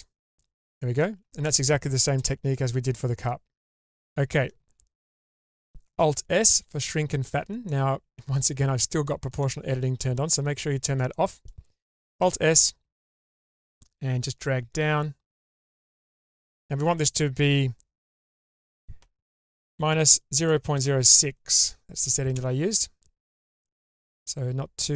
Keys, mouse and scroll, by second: 0.0-1.0 middle drag, 1.3 shift+middle click, 3.8 middle click, 6.0 alt+s, 8.2 ctrl+z, 9.3 click, 10.1-10.6 scroll down 2, 10.6 shift+middle click, 11.1 middle click, 12.2 alt+s, 18.4-22.4 drag, 24.0-24.9 middle drag.